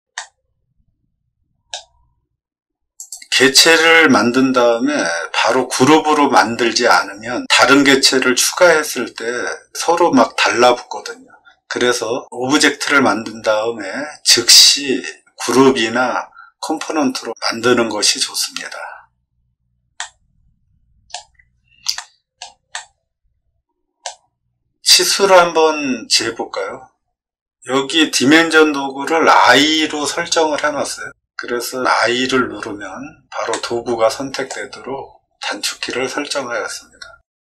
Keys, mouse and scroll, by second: 0.1-1.6 middle drag, 2.9 click, 19.9-21.0 middle drag, 21.4 middle click, 21.9 shift+middle click, 22.7-23.9 middle drag, 31.9 i, 33.4 middle click, 34.7-35.3 scroll up 2.